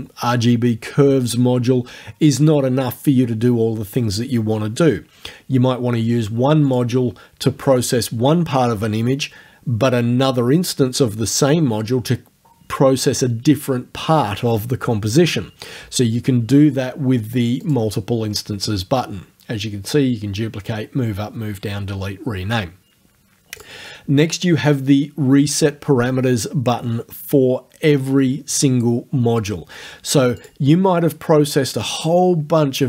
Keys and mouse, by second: 6.7 click, 17.6 click, 23.6 click, 30.4 click.